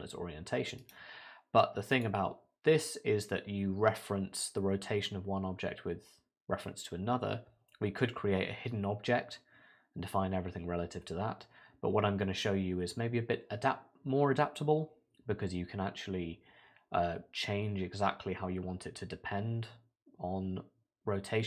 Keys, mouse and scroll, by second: 0.8 right click.